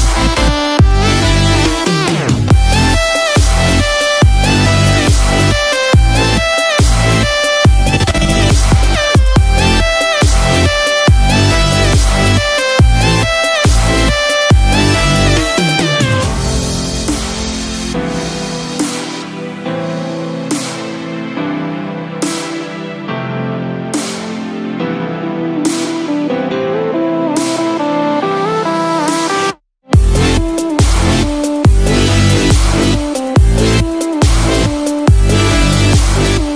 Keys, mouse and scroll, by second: 0.6 click, 0.6 scroll down 1, 1.3-1.9 scroll up 7, 1.9 middle click, 2.7 KP_7, 4.3 click, 4.3 scroll up 1, 5.0 scroll up 3, 5.4 scroll down 1, 8.1 click, 8.6 scroll down 3, 9.2 middle click, 10.1-10.4 scroll up 5, 10.7 scroll down 1, 16.6 click, 20.1 click, 22.4 scroll down 4, 22.5 Tab, 23.8 scroll down 1, 34.5 shift+middle click, 34.5 click, 34.5 scroll down 4, 35.7 shift+click.